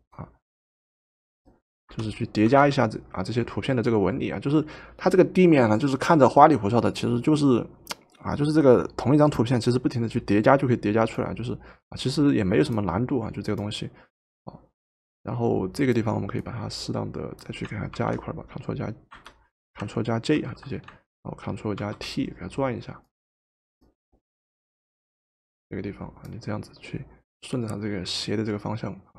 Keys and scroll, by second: 1.9 Return, 2.5 v, 18.0 ctrl+t, 19.1 Escape, 20.4 ctrl+j, 21.8 ctrl+t.